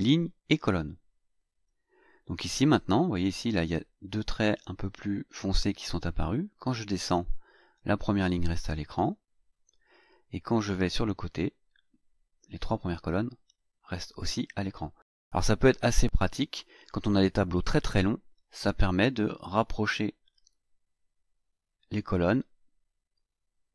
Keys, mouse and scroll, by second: 0.7 click, 6.2-6.6 scroll down 2, 7.0-7.6 scroll down 2, 7.9-8.3 scroll down 2, 8.4-8.8 scroll up 2, 10.8-14.4 drag, 19.0-23.7 drag.